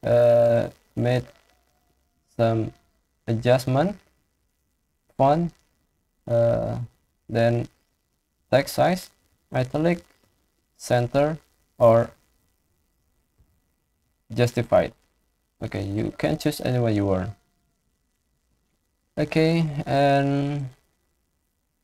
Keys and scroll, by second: 9.1 ctrl+i, 10.1 ctrl+e, 13.2 ctrl+j.